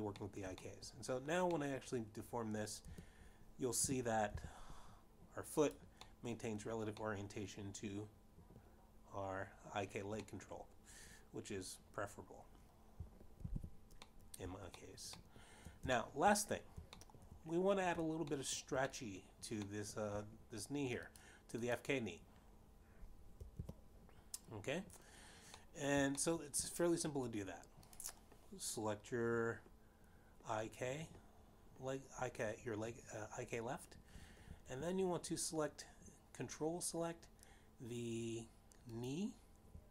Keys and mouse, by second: 0.4 shift+middle click, 1.1 shift+middle click, 1.7 middle click, 2.4 shift+middle click, 2.8 middle click, 4.0 middle click, 5.2 Tab, 6.2 g, 6.2 z, 7.9 click, 8.4 middle click, 9.4 middle click, 12.6 middle click, 15.2 alt+g, 16.4 middle click, 17.2 shift+middle click, 17.5 shift+middle click, 18.3 shift+middle click, 19.3 shift+middle click, 20.7 shift+middle click, 21.2 middle click, 22.0 middle click, 23.8 click, 25.8 f, 28.0 middle click, 28.5 shift+middle click, 30.3 click.